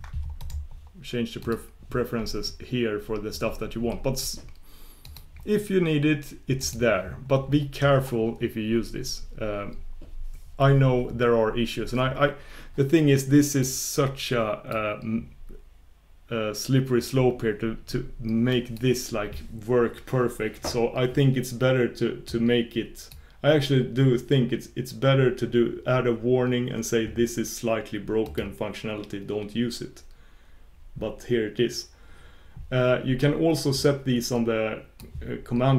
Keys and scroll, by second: 1.7 ctrl+super+Return.